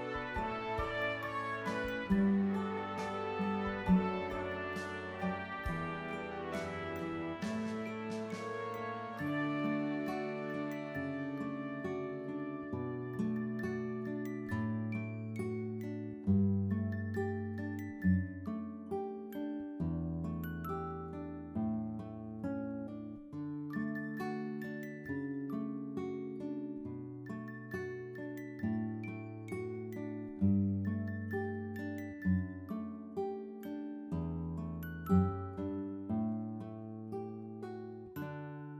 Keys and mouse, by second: 4.3 click, 5.9 click, 7.1 click, 7.2 click, 10.8 click, 18.3 click, 20.4 click, 21.6 click, 23.7 click, 25.6 click, 26.8 click, 30.0 click, 30.4 double right click, 31.7 double right click, 31.8 click, 34.0 click, 34.5 double right click, 35.6 click.